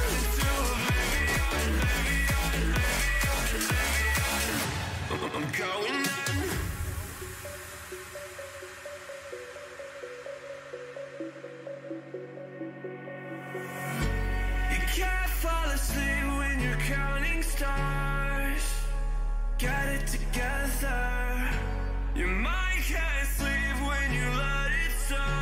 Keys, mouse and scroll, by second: 0.9 b, 2.5 g, 4.3 a, 5.3 b, 6.9-8.1 middle drag, 8.4 middle click, 9.8 g, 12.2 middle click, 12.5 a, 13.6 middle click, 15.5 middle click, 15.9 a, 16.2 a, 17.2 b, 17.7-20.4 drag, 19.6 g, 25.0 a.